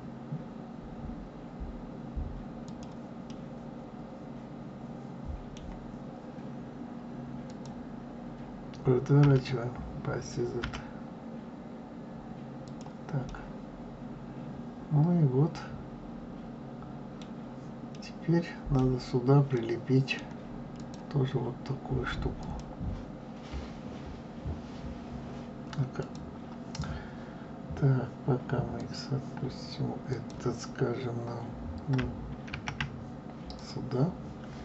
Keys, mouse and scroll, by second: 3.2-6.2 middle drag, 7.4 click, 9.2 r, 13.2-16.3 middle drag, 17.8-20.7 middle drag, 20.7 click, 22.3 click, 25.9 click, 28.7 click, 30.0 click, 32.5 shift+d.